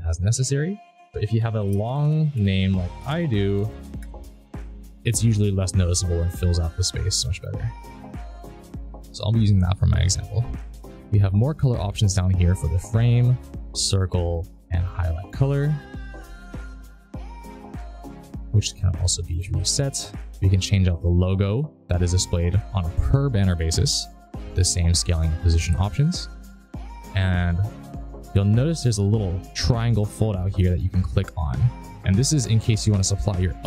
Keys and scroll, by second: 0.6 ctrl+a, 0.7-2.7 typing.